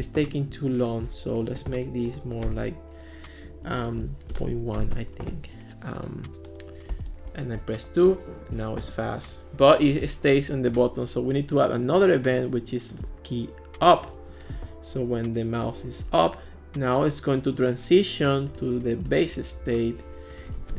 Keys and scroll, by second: 3.4-4.4 typing, 6.9-8.3 typing.